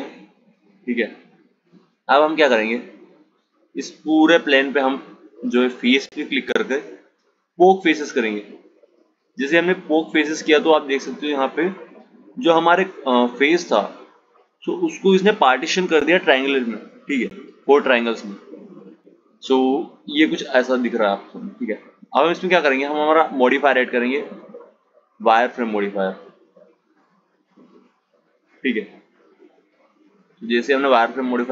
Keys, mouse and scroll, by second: 5.0-8.0 drag, 9.0 click, 19.9 click, 25.3 click, 27.1 click, 29.4 click.